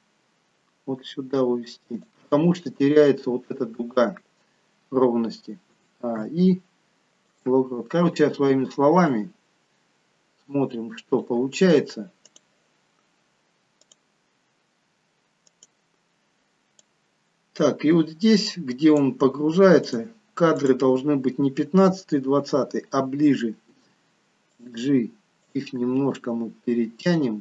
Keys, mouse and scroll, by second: 6.1 i, 9.2 click, 13.8 click, 20.8 click, 23.7 g, 25.4 click, 25.8 g.